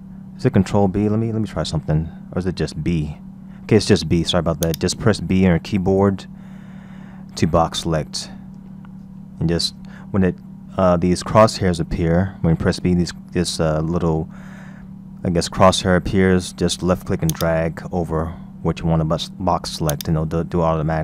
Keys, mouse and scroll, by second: 1.9 a, 3.1 b, 12.6 b, 19.9 click.